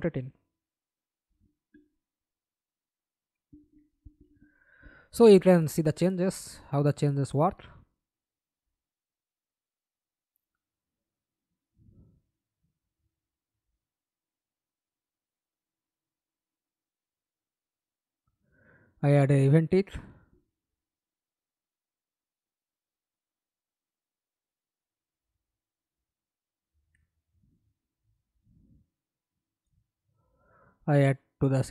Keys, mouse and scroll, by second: 0.0-1.5 typing, 2.4 Escape, 3.1 middle click, 3.8 F11, 9.0-9.8 scroll down 1, 9.8 scroll down 1, 9.8 right click, 13.1-13.7 scroll up 3, 15.4 right click, 16.2 right click, 16.9 right click, 17.8-19.7 typing, 19.8 Return, 22.3 alt+click, 26.0 right click, 26.8 alt+click, 27.2 right click, 28.2 alt+click, 28.6 alt+right click.